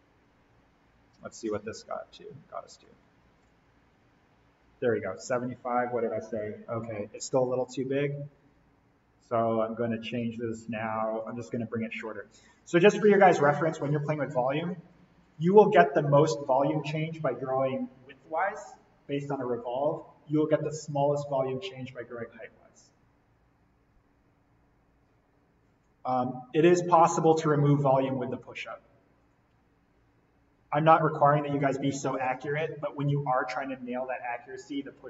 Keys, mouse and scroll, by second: 2.8 alt+l, 3.3 click, 7.2 Escape, 9.6 click, 14.5 click, 26.1 click, 28.5 click, 31.5 alt+l, 32.1 click.